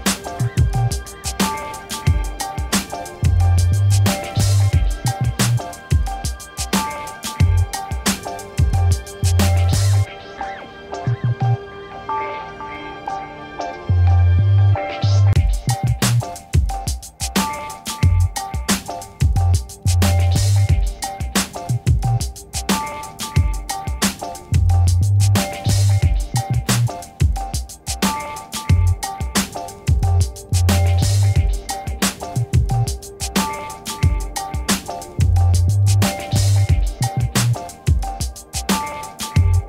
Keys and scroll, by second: 12.3 0, 12.5 2, 15.0 Return, 23.5 1, 23.9 Return, 27.3 v.